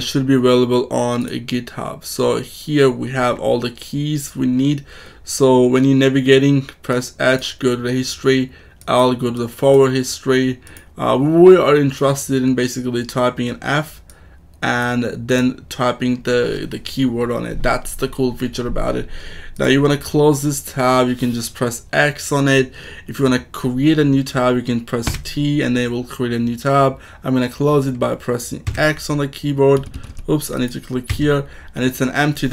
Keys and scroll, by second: 25.0 t, 28.6 x, 29.9 Escape, 31.0 x.